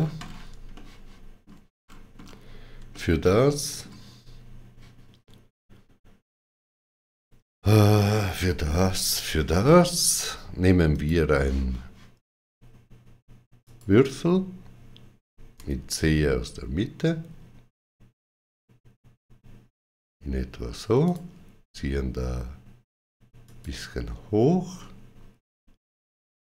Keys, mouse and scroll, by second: 0.5 shift+middle click, 1.6 shift+middle click, 1.6-2.1 scroll down 2, 2.7 shift+middle click, 10.7 click, 13.5 click, 13.5 shift+middle click, 15.4 c, 20.9 click, 23.3 click.